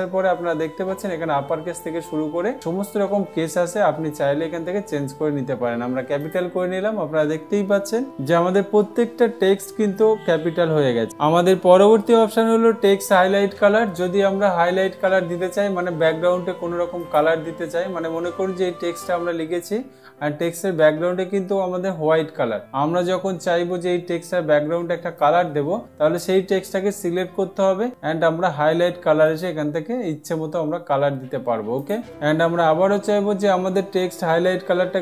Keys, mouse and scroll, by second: 0.0-1.0 drag, 6.8-7.8 drag, 17.5-18.6 drag, 25.7 click, 29.8 click.